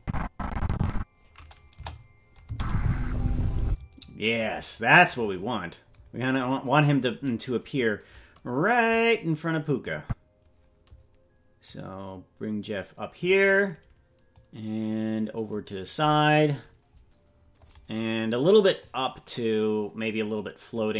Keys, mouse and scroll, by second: 0.0-1.5 drag, 1.7 KP_0, 2.5 space, 4.9 space, 6.1-6.6 scroll down 1, 6.6-9.8 scroll down 4, 9.8 click, 11.7-13.3 drag, 14.3-15.6 drag, 18.8-20.8 drag.